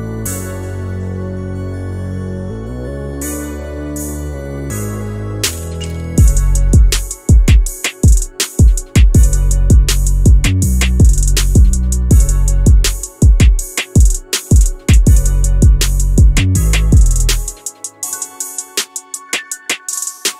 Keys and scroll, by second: 13.0 ctrl+z, 13.2 ctrl+z, 13.7 q.